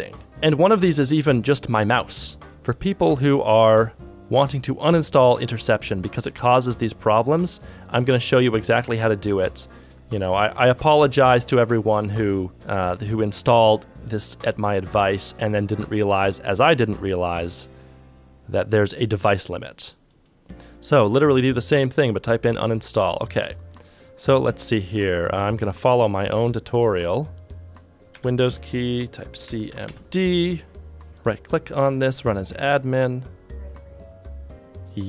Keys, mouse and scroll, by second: 2.5 ctrl+z, 2.5 ctrl+s, 26.9 ctrl+Tab, 27.9 ctrl+c.